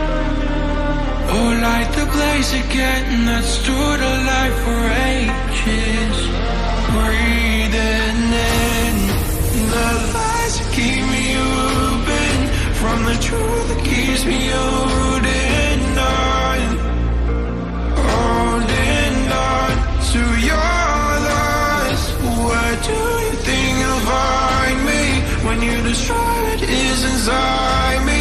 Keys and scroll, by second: 6.1 ctrl+j.